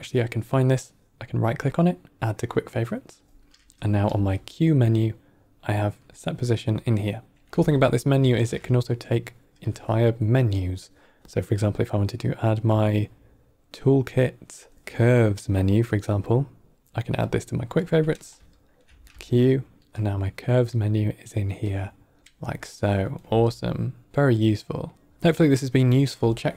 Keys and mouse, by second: 4.0 q, 7.4-8.2 typing, 19.0 q, 23.1 typing, 24.4-24.7 middle drag.